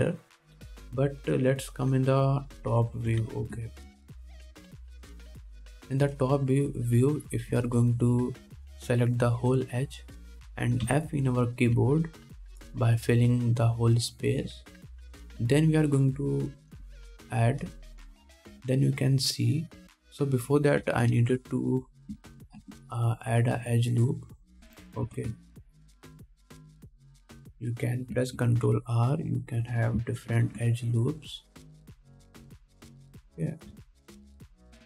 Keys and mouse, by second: 3.7 click, 3.7 middle click, 3.7 right click, 3.9 Tab, 4.3 alt+a, 4.7 ctrl+s, 8.4 2, 8.9 alt+middle click, 11.4-13.0 drag, 12.1 f, 13.0 ctrl+Tab, 16.2 middle click, 21.4 middle click, 22.0 Tab, 22.1-31.7 alt+drag, 22.3 alt+a, 23.8 ctrl+r, 26.3 KP_1, 26.6 ctrl+z, 30.0 ctrl+r, 31.5 ctrl+r, 33.1-34.8 alt+drag, 33.2 alt+a, 34.1 ctrl+r.